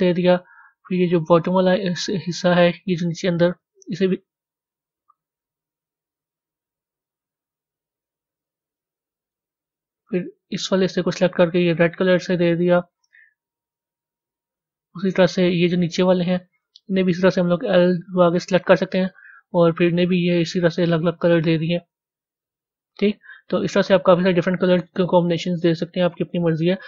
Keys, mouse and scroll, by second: 0.4-3.5 middle drag, 4.9 ctrl+z, 8.3 z, 8.7-9.7 middle drag, 12.5 click, 14.1 middle click, 14.6-15.3 scroll up 4, 15.3-15.6 scroll up 2, 15.6 middle click, 20.7 click, 22.0 Tab, 22.6-23.6 scroll down 3, 23.6-26.8 middle drag.